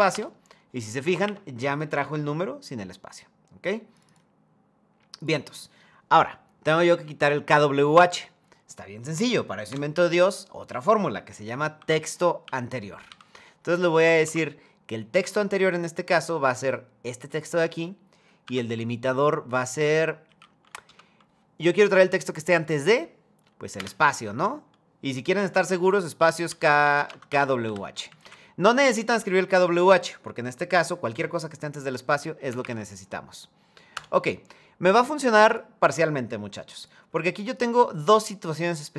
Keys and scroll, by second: 0.9 Up, 13.6 Down, 13.9 Tab, 20.5 BackSpace, 26.5 BackSpace, 26.7 BackSpace, 26.8 Caps_Lock, 33.6 Return.